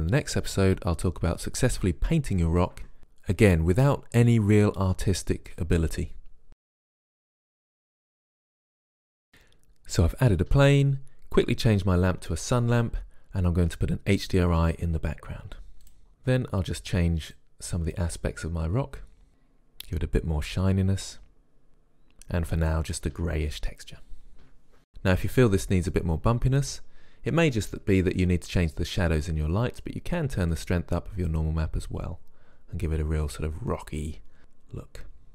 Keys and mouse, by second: 8.2 shift+z, 8.4 shift+a, 8.7 s, 9.2 click, 9.8 click, 10.0 s, 10.5 right click, 10.9 click, 12.4 click, 13.1 shift+a, 14.9 click, 15.4 click, 15.8 shift+z, 17.0 click, 18.8 click, 20.2 click, 30.7 click, 31.9 click.